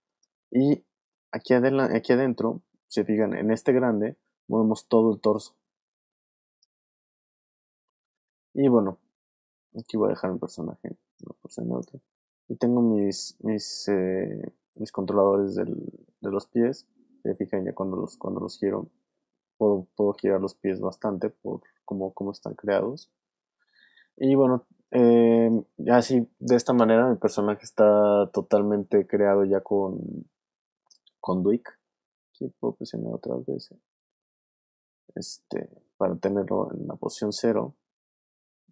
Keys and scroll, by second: 6.9 super+z, 9.0 super+z, 10.6 space, 12.4 v, 14.3 alt+space, 15.2 space, 16.0 super+z, 16.6 super+w, 17.3 w, 22.7 alt+super+z, 23.5 super+z, 24.4 alt+space, 25.2 space, 36.9 v, 38.6 shift+super+z.